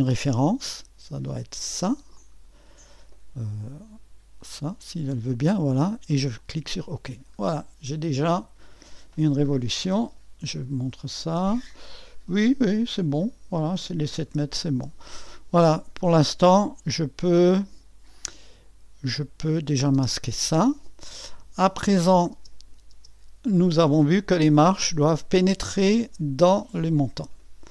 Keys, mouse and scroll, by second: 7.4 middle click, 8.2-9.9 drag, 9.7-10.4 typing, 11.7-12.9 drag, 13.8 scroll down 2, 19.4-22.3 drag, 22.3 space, 22.9 space, 24.1-27.7 drag.